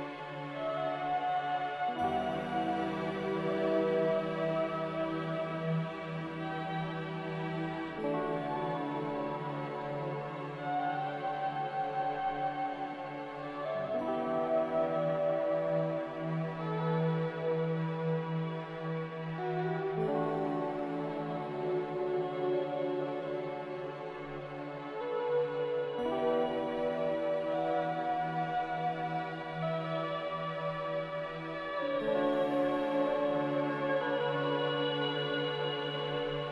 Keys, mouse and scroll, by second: 9.6 m, 18.0 b, 21.0-21.8 typing, 24.6 typing, 24.8 Return, 27.4 typing, 29.2 x, 31.5 m.